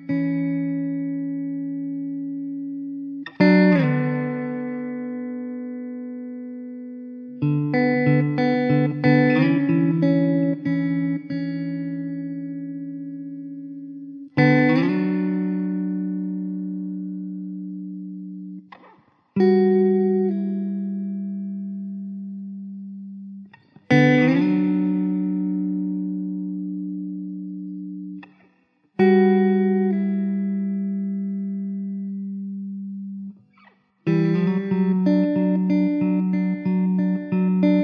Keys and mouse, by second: 0.4 alt+middle click, 21.1 alt+middle click, 30.8 middle click.